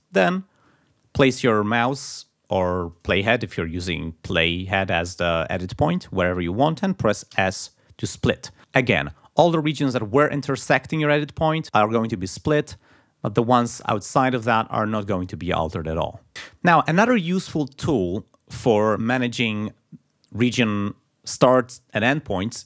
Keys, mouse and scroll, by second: 4.4 click, 5.9 click, 7.3 s, 13.6 click.